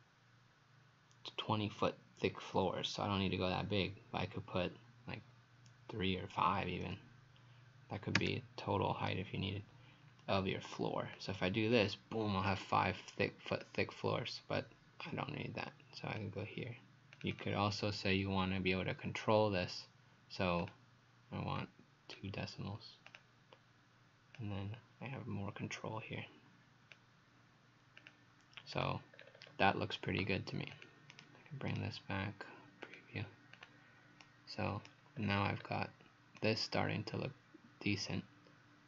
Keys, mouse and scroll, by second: 6.8 KP_5, 8.2 Return, 10.3 scroll up 2, 11.2 click, 11.2-13.6 scroll up 1, 17.4 click, 20.6 click, 29.2-30.1 scroll down 5, 31.1 right click, 31.7 right click, 32.9 click, 34.2 right click, 35.2-35.6 scroll down 5, 36.4 right click.